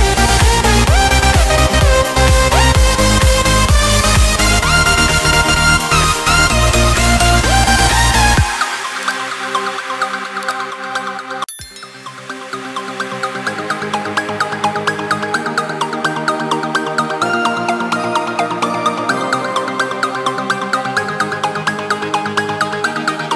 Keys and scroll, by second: 0.4 ctrl+space, 8.3 ctrl+space, 15.4 ctrl+x, 16.6 ctrl+v, 17.8 ctrl+space.